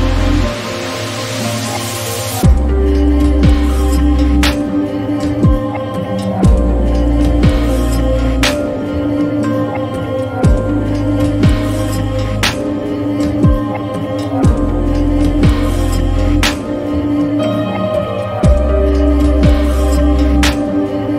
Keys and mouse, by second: 1.2 middle click, 2.7 shift+middle click, 3.8 shift+middle click, 13.2-14.5 drag, 16.5-18.0 drag, 20.1 click.